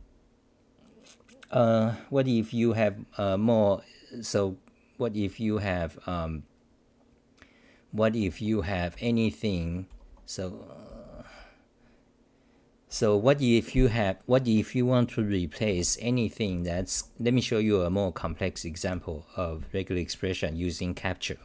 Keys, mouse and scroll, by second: 8.3-11.7 typing, 12.9 t, 15.7 6, 16.5 j, 16.7 t, 18.9 k.